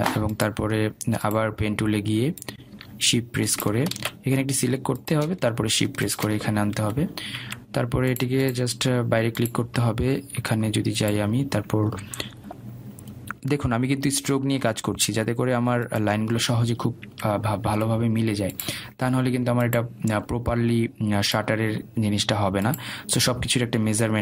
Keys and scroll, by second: 6.1 ctrl+z, 8.9 Escape, 18.8 Escape.